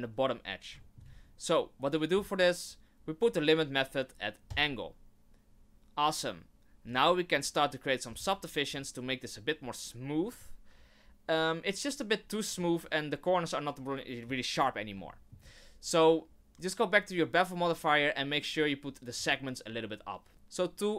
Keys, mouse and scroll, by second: 0.8 shift+middle click, 1.1 scroll up 3, 4.5 click, 6.9 click, 8.6-9.2 scroll down 4, 10.3 click, 12.5 middle click, 15.1 shift+middle click, 19.2 click.